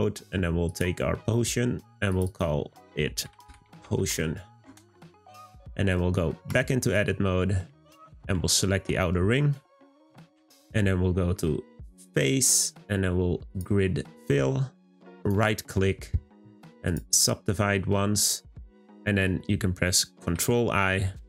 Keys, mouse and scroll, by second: 0.7 click, 2.1 click, 2.3-5.3 drag, 6.0 middle click, 6.5 Tab, 7.0-7.7 scroll up 1, 7.7 2, 9.6 alt+shift+click, 11.9-15.0 drag, 15.2-17.7 right drag, 17.7-20.4 scroll up 1.